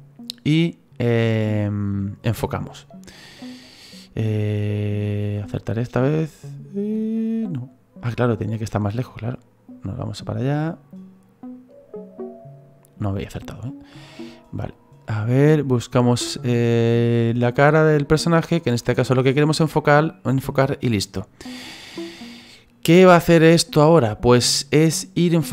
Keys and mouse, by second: 4.3 click.